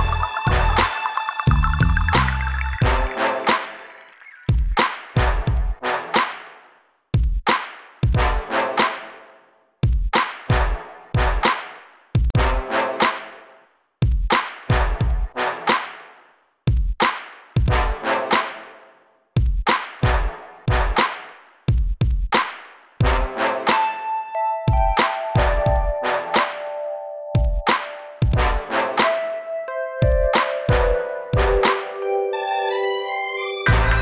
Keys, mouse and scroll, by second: 0.9 click, 2.8 click, 4.9 click, 7.3 click, 9.1 click, 10.1 click, 10.8 click, 12.0 click, 14.7 click, 15.8 click, 16.6 click, 17.2 scroll down 2, 19.6 click, 24.6 middle click, 25.9 click, 27.7 click, 30.7 click, 32.7 right click, 33.3 click, 33.6 click.